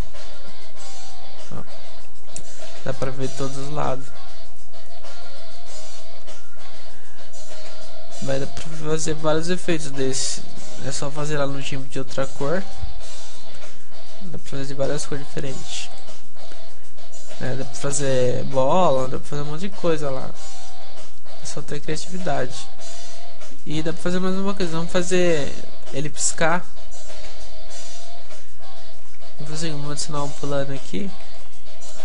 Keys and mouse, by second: 4.3 a, 5.0 a, 8.1 p, 8.3-15.2 middle drag, 15.9-17.9 middle drag, 19.4-23.0 middle drag, 23.5 a, 24.6-26.4 middle drag, 28.9 p, 29.1-31.3 middle drag, 30.3 shift+a, 31.3 alt+g, 31.9-32.0 drag.